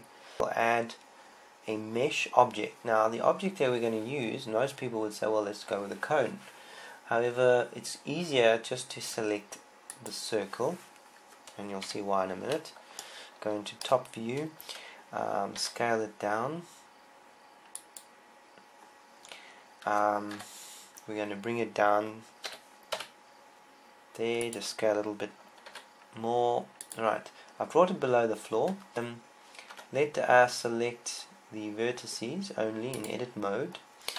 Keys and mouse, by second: 0.3 a, 0.9 shift+a, 12.7 KP_7, 16.4 s, 18.7 click, 21.1 KP_1, 23.3 g, 26.5 click, 26.5 s, 27.8-28.9 drag, 30.5 Tab, 33.9-34.1 drag.